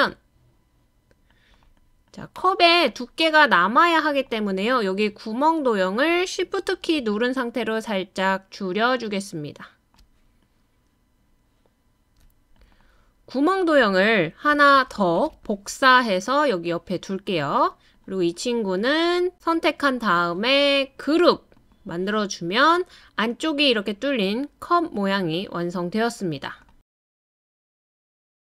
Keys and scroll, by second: 14.7 super+c, 15.2 super+v.